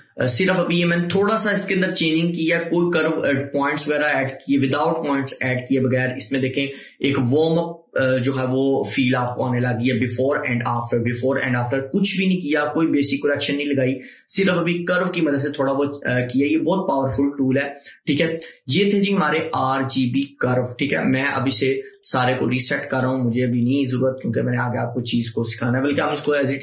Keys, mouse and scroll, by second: 9.4 click, 22.0 click, 22.0 click, 26.2 ctrl+z.